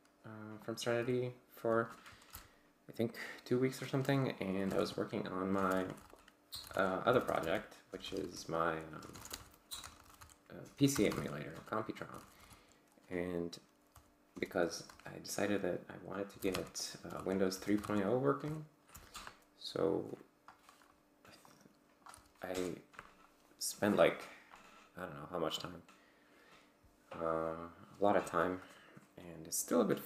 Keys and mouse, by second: 0.6 click, 2.4 ctrl+l, 4.7 /, 4.8 Tab, 5.7 ctrl+u, 5.7-12.9 typing, 13.9 c, 14.3 BackSpace, 14.5 r, 14.9 BackSpace, 16.1-17.7 typing, 17.2 Tab, 17.8 Tab, 18.9 ctrl+l, 19.1 Return, 21.5-22.2 drag, 22.1 w, 22.5 Return, 24.1-24.7 drag.